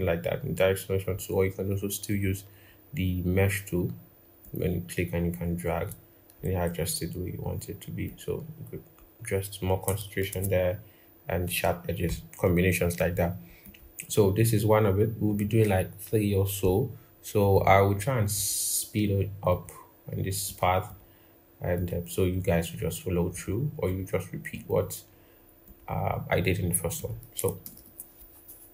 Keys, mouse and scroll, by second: 10.1 ctrl+z, 20.7 double click, 27.4 ctrl+=, 27.6 ctrl+=.